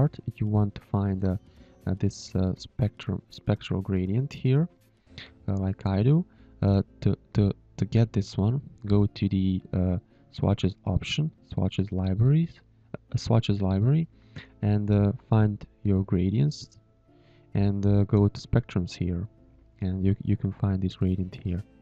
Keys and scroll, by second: 3.0 space.